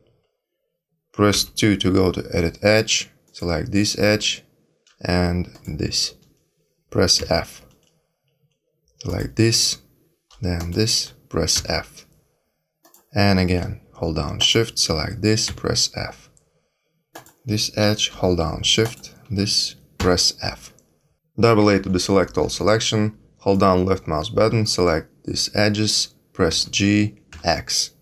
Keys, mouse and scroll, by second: 1.3 2, 3.2 click, 5.5 shift+click, 7.1 f, 9.0 click, 10.5 shift+click, 11.5 f, 12.8 click, 14.3 shift+click, 15.4 f, 17.1 click, 18.8 shift+click, 19.9 f, 21.5-21.9 a, 23.5 click, 26.5 g.